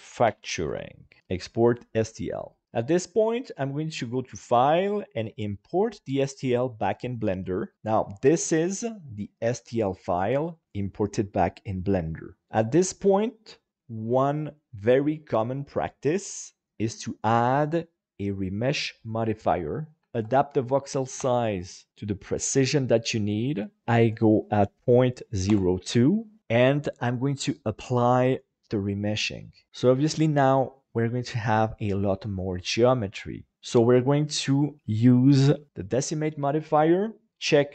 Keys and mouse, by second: 4.0-6.6 drag, 8.5 KP_Divide, 9.1-12.4 middle drag, 16.6-19.1 drag, 20.0-21.3 drag, 23.8-25.8 drag, 26.4-28.2 drag, 34.1-35.9 drag.